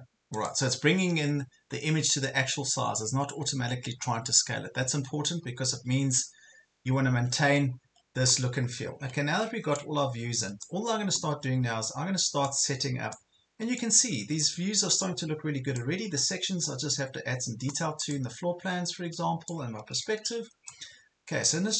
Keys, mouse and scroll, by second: 6.9 ctrl+scroll up 1, 7.7 ctrl+scroll down 1, 8.2 ctrl+scroll up 1, 9.1 ctrl+scroll down 1, 9.9-16.3 drag, 18.9 ctrl+scroll down 1, 19.5-21.7 drag.